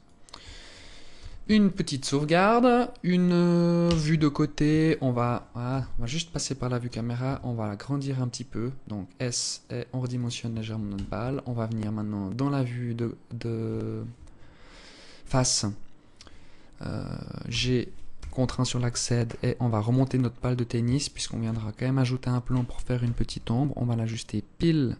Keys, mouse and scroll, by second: 0.7 ctrl+s, 3.4 KP_1, 4.4 alt+shift+click, 5.3 KP_0, 6.8 s, 10.5 KP_1, 11.2-11.7 scroll down 4, 17.0 g, 19.6-20.1 scroll up 9, 20.6 alt+shift+click, 21.2-21.6 scroll up 2, 22.5 g.